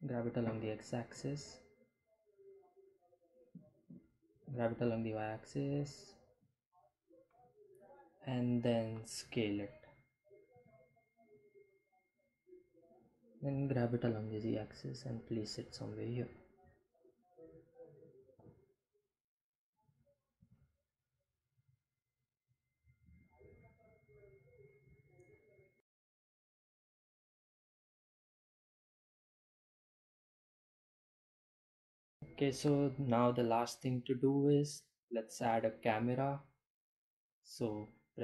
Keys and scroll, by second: 3.1 g, 3.3 y, 5.6 ., 8.9 s, 11.6 g, 11.8 z, 16.3 g, 16.8 x, 18.2 s, 21.1 g, 21.6 x, 25.3 g, 25.4 x, 35.5 shift+a.